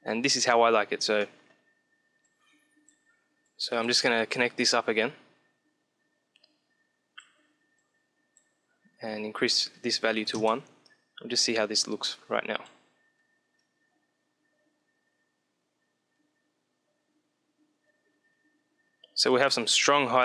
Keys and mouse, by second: 1.6-5.8 drag, 7.7-11.0 drag, 11.5-13.2 drag, 13.6 middle click.